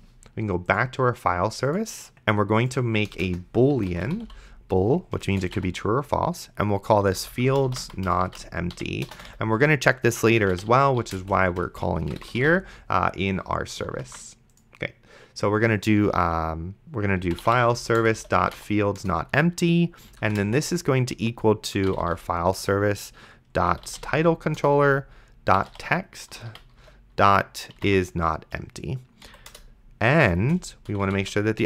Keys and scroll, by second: 3.4 Return, 3.5-13.0 typing, 14.3 ctrl+s, 17.2-20.4 typing, 21.5-28.3 typing, 24.6 Return, 29.3 Down, 29.5 Return, 30.4 space, 31.2 shift+7.